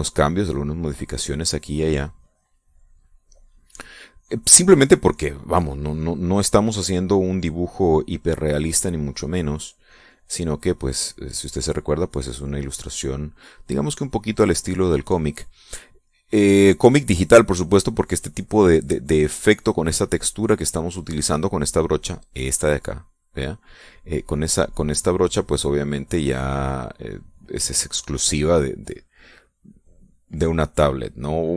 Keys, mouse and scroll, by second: 0.4-3.5 drag, 3.7-5.2 drag, 5.6 middle click, 9.2 click, 10.3-15.3 drag, 15.5 middle click, 16.9-20.9 drag, 21.2 click.